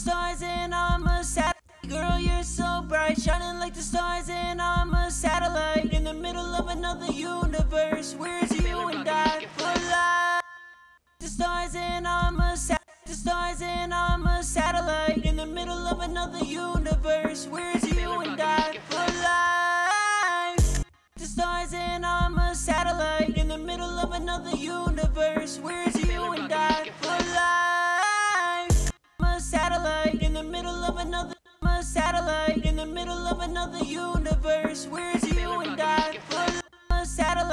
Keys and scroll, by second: 12.1 space, 15.2 ctrl+shift+x, 19.2 ctrl+shift+x, 33.5 ctrl+shift+x, 34.9 ctrl+shift+x, 36.1 typing.